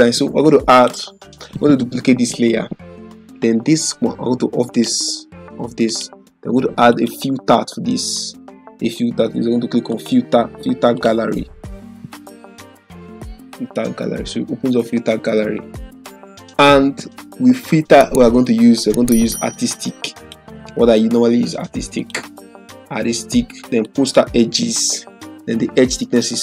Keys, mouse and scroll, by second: 0.7 click, 2.3 ctrl+j, 4.7 click, 9.9 click, 20.2 click.